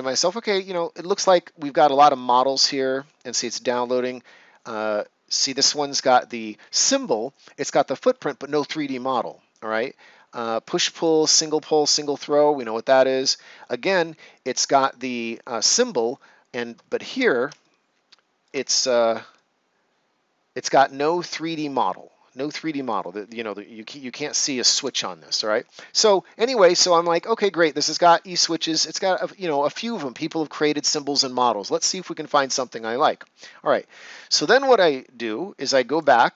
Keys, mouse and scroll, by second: 10.9 click, 16.7 click, 17.5 ctrl+right click, 28.0 Escape, 32.4 click, 35.9 click.